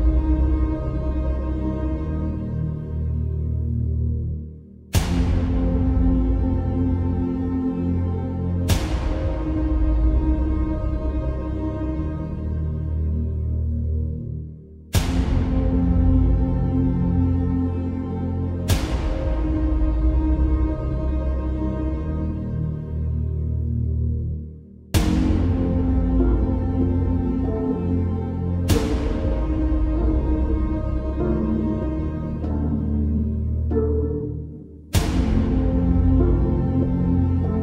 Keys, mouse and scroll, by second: 11.8-12.2 alt+scroll down 1, 12.2 alt+scroll up 1, 12.3 space, 12.4-13.1 click, 12.8 space, 13.1 alt+scroll down 1, 13.8-14.7 drag, 17.8 click, 23.9 shift+click, 25.1-29.2 ctrl+drag, 29.6 alt+scroll up 1, 29.9 space, 30.1-31.0 click, 30.4 space, 32.2 click, 34.4 space, 34.6 click, 34.9-35.2 space, 35.9 b, 36.6 right click.